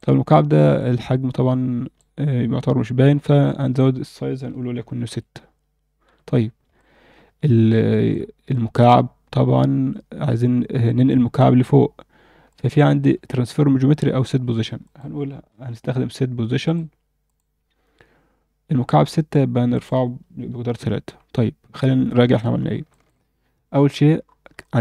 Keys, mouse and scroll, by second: 0.1-0.5 scroll down 2, 0.5-1.9 alt+middle drag, 3.4-5.1 shift+drag, 6.0 z, 6.4 scroll down 1, 6.7-7.7 alt+middle drag, 7.9 shift+middle click, 8.5-8.9 middle drag, 8.9 scroll down 1, 9.1-9.8 scroll up 2, 12.4 click, 13.3 shift+a, 19.7-20.8 drag, 21.7 scroll down 2, 22.1 alt+middle click, 22.6 scroll down 1, 22.9 alt+shift+middle click, 23.5 KP_7, 24.2 scroll up 1, 24.3 scroll down 1, 24.6 alt+shift+middle drag.